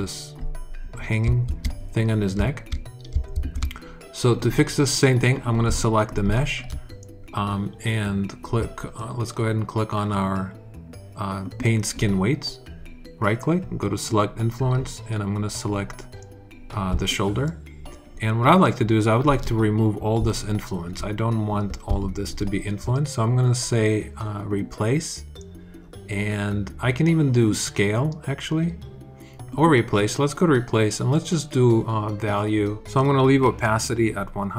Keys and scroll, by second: 1.3 super+z, 3.2 super+z.